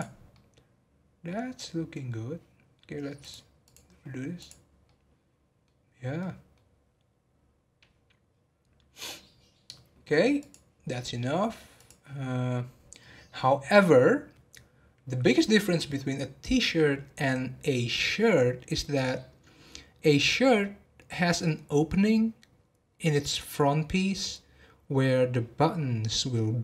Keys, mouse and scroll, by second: 0.3-2.1 middle drag, 2.1 scroll up 2, 3.2 click, 4.3 click, 4.8-5.8 middle drag, 5.8 scroll down 1, 6.1 middle click, 6.8 scroll down 1, 10.5 click, 11.8 click.